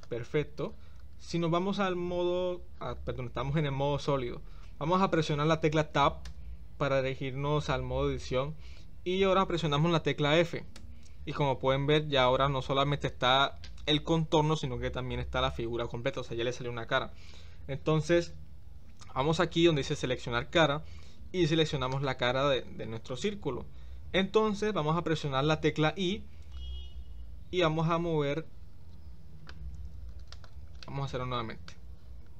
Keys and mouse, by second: 6.3 Tab, 10.8 f, 20.6 click, 21.9 click, 30.3 click, 30.8 middle click.